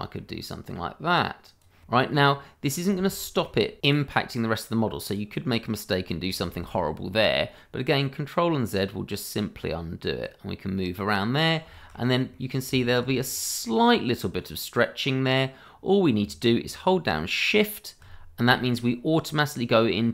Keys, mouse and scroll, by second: 0.6 click, 1.9 middle click, 2.8 ctrl+z, 3.2 middle click, 3.8 scroll up 1, 4.0 ctrl+z, 4.3 middle click, 5.1 click, 6.1 middle click, 6.9 ctrl+z, 7.3 middle click, 8.7 click, 10.3 middle click, 11.7 shift+middle click, 11.8 middle click, 12.0-12.3 scroll up 2, 12.3 middle click, 12.7 shift+middle click, 12.8 middle click, 12.9 shift+middle click, 13.0 scroll up 1, 14.2 middle click.